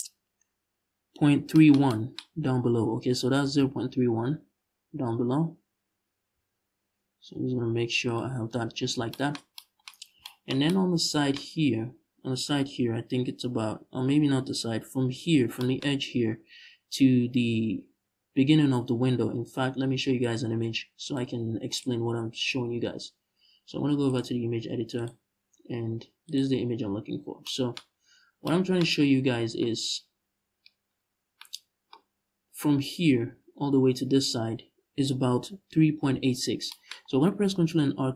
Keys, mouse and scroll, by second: 1.9-2.4 scroll up 1, 3.1 g, 7.8 shift+click, 8.4-8.7 scroll down 1, 19.9-29.3 drag, 26.5 scroll up 2, 26.9 scroll down 1, 27.8 scroll down 1, 29.3-38.1 middle drag, 30.6-31.1 scroll up 1, 36.7-37.5 scroll up 1, 37.5 ctrl+r.